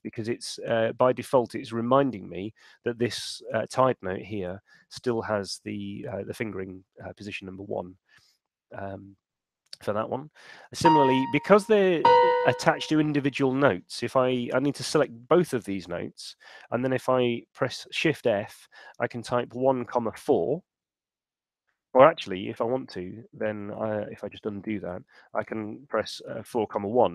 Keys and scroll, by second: 16.4 shift+f, 19.8 4, 21.0 Return, 23.0 super+z, 25.2 shift+f, 26.2 4, 26.6 1, 27.0 Return.